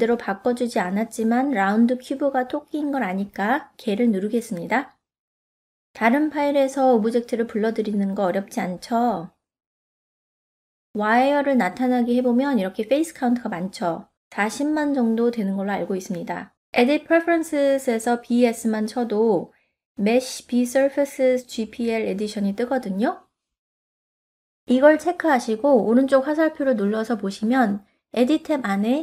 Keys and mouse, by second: 7.6 ctrl+middle click, 8.5 shift+middle click, 9.8 click, 10.8 shift+middle click, 11.8 click, 13.0 middle click, 13.9-16.0 middle drag, 16.2 ctrl+middle click, 16.8 shift+middle click, 17.1 middle click, 19.6-25.0 shift+middle drag, 26.0 click.